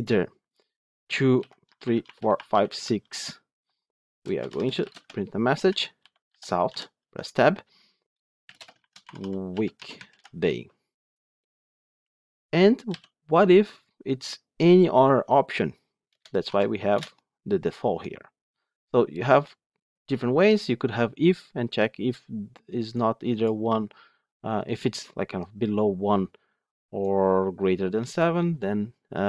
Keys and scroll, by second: 6.9 Tab, 16.9 Return.